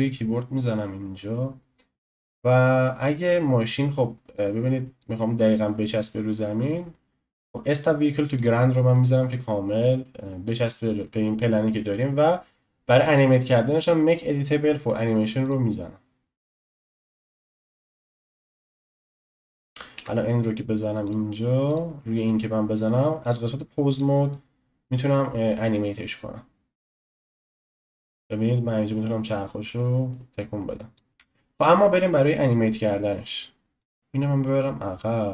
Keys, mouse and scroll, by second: 4.4 click, 8.4-20.1 drag, 20.0 n, 21.0 click, 21.6 click, 23.2-26.2 drag, 27.5-30.5 drag, 31.1-33.8 shift+middle drag, 33.8 click.